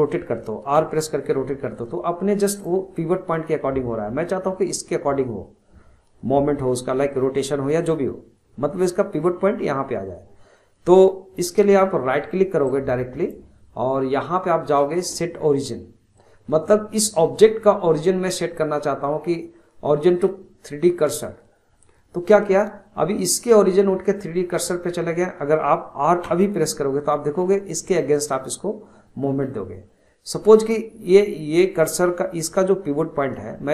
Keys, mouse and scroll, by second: 0.8 r, 12.6-26.2 right drag, 26.2 r, 33.2-33.7 scroll down 1.